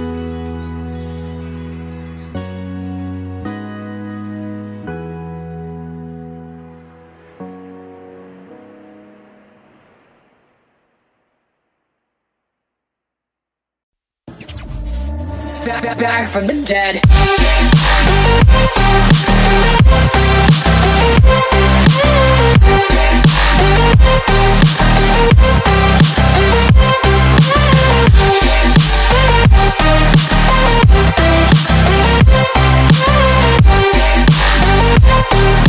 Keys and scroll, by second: 0.0 super+space, 0.1 super+space, 0.8 v, 5.8 shift+super+F5, 14.3 space, 14.9 alt+super+space, 15.0 alt+super+space, 21.6 v, 22.5 space, 23.0 alt+super+space, 23.1 alt+super+space, 24.0 alt+super+space, 26.0 typing, 28.4 BackSpace, 29.8 typing, 31.2-34.7 typing.